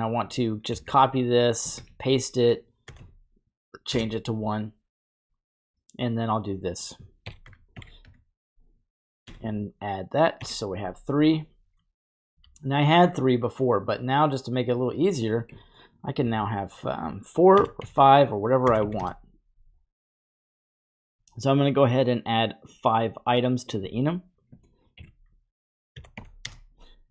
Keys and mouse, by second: 1.4 ctrl+click, 5.1 click, 6.2-12.4 drag, 13.7 click, 14.8-19.0 drag, 22.7 drag, 23.6 click.